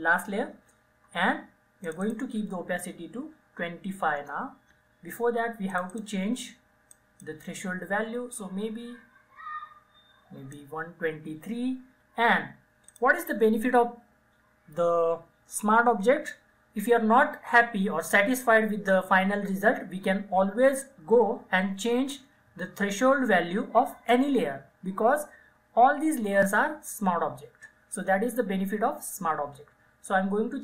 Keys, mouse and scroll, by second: 0.0 ctrl+j, 1.9 click, 3.3 typing, 4.3 Return, 5.8-13.0 drag.